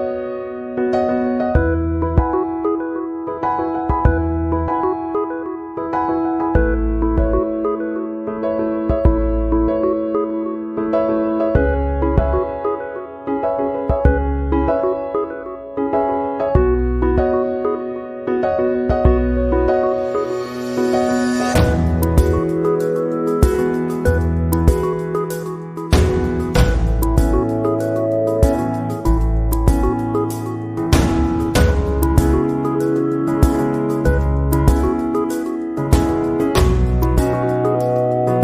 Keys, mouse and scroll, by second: 0.1 click, 1.9 click, 3.3 click, 5.3 click, 6.4 click, 7.1 click, 7.8 click, 9.5 click, 11.5 click, 12.4 click, 13.3 middle click, 14.9 shift+middle click, 15.7 middle click, 17.0 click, 19.3 a, 20.6 a, 23.0 click, 30.6 ctrl+i, 32.7 x, 36.4 a.